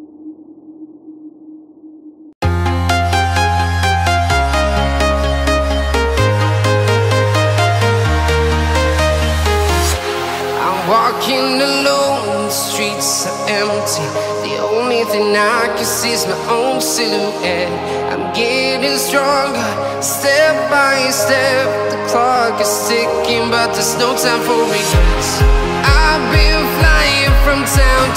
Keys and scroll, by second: 10.8 alt+super+space, 10.9 alt+super+space, 10.9 alt+super+space, 11.0-12.1 typing, 27.5 super+2.